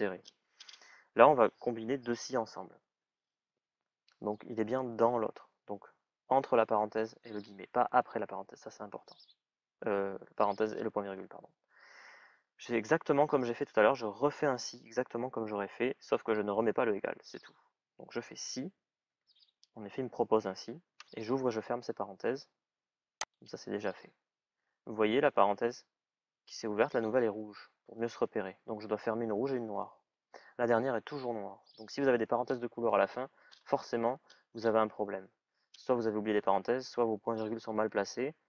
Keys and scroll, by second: 4.9 BackSpace, 17.8 shift+s, 18.2 shift+i.